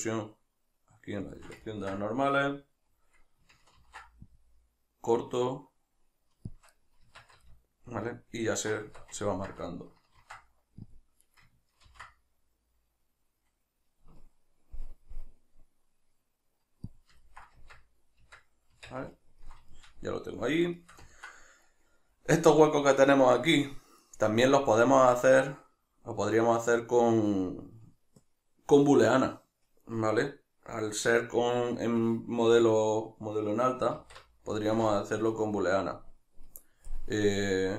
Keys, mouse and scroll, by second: 1.3 shift+click, 1.7 ctrl+middle click, 3.8 ctrl+r, 6.6 shift+click, 6.7 middle click, 7.0 Tab, 7.4 ctrl+middle click, 8.9 Tab, 9.3 ctrl+middle click, 10.2 ctrl+r, 11.4 right click, 11.9 ctrl+b, 17.0 click, 17.3-20.0 ctrl+middle drag, 17.6 Tab, 25.0 Tab, 34.9-37.7 shift+middle drag.